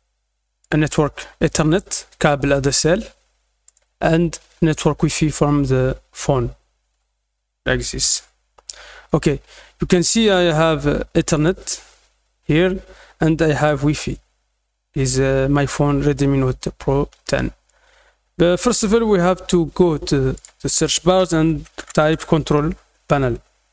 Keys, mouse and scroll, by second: 0.6 click, 3.6 click, 11.3 click, 13.5 click, 20.3 click.